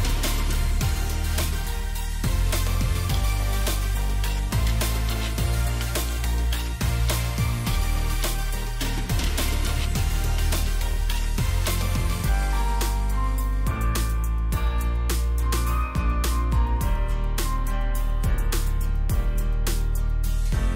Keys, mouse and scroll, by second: 0.0 double click, 1.9 alt+click, 3.5 shift+click, 8.6 ctrl+g, 9.3 shift+click, 13.2 double click, 13.6-14.1 scroll down 2, 14.7 space, 16.7 alt+click.